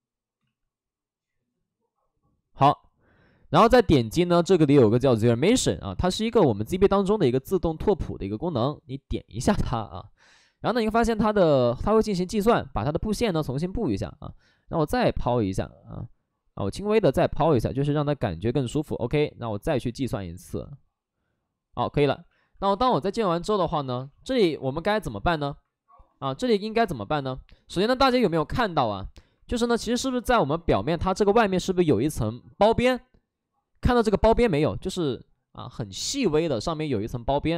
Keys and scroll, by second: 0.3 ctrl+z, 3.1 ctrl+z, 12.6 shift+f, 13.5 shift+f, 15.3 ctrl+z, 16.5 ctrl+z, 22.3 shift+f, 22.9 alt+s, 24.1 shift+f, 25.0 alt+s, 28.1 alt+s.